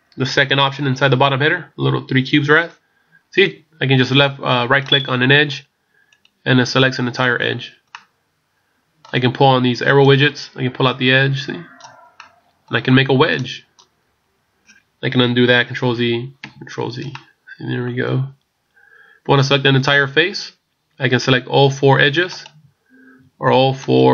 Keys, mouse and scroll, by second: 0.3 click, 4.8 right click, 6.1 right click, 7.9 middle click, 10.1 click, 12.1 middle click, 13.4 click, 14.3-15.3 scroll down 3, 15.8 ctrl+z, 17.1 middle click, 18.1-19.3 scroll up 1, 22.3 shift+right click.